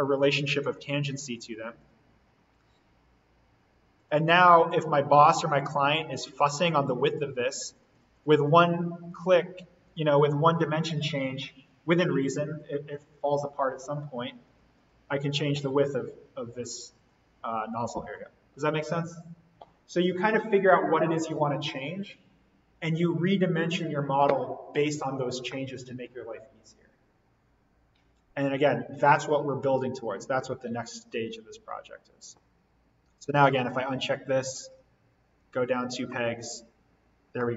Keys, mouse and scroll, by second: 0.6 click, 2.2-2.7 scroll up 1, 3.9 click, 29.6-36.2 drag, 36.2-36.5 scroll up 1, 36.9 scroll down 1, 37.4-37.5 middle drag.